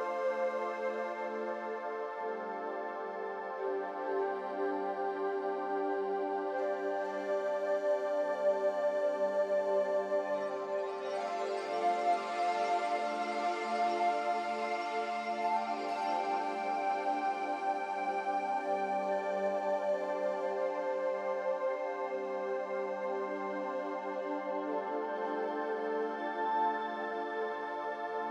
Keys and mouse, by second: 0.5-1.4 middle drag, 2.7 click, 4.4-4.9 middle drag, 5.4 shift+a, 8.2 s, 9.7 g, 13.7 g, 18.9 click, 19.2 z, 23.0 click, 23.8 s, 27.1-28.3 drag.